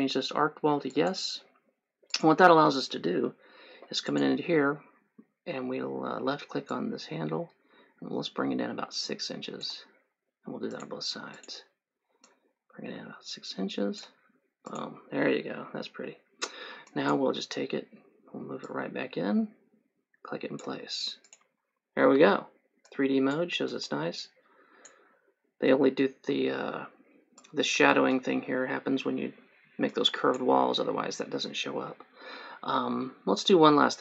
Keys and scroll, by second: 22.4 3, 31.2 Escape.